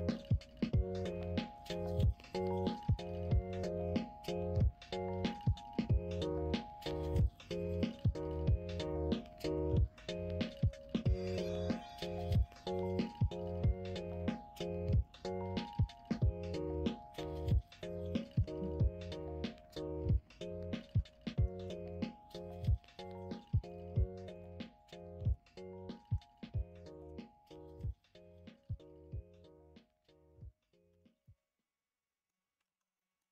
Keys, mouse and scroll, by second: 0.0 middle click, 1.5 click, 2.7 click, 3.2 shift+click, 4.3 f, 5.3 ctrl+z, 6.0 click, 7.1 e, 9.5 1, 9.8 click, 10.4 click, 11.5 m, 12.6-14.3 middle drag, 15.0 click, 15.8 middle click, 16.8 f, 18.3 ctrl+z, 19.4 f, 21.5 ctrl+z, 22.6 g, 24.5 2, 24.8 click, 25.4 click, 26.0 alt+z, 26.2 click, 26.8 shift+click, 30.8 f, 31.2-32.2 middle drag, 32.6 alt+z, 32.9 middle click.